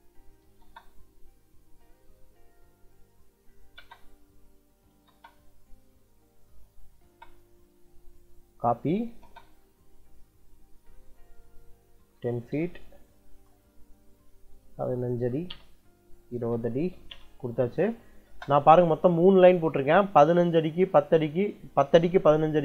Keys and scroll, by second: 0.3 l, 0.5 space, 3.6 space, 4.8 l, 4.9 space, 6.9 space, 8.7 c, 9.1 space, 11.7-12.9 typing, 13.2 Return, 14.5 1, 15.1 ', 15.4 Return, 16.2 2, 16.7 ', 17.0 Return, 18.1 space.